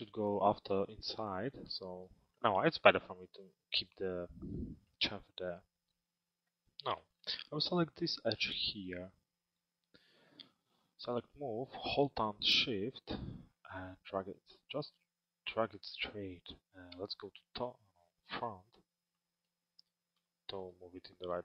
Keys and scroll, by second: 16.6 t.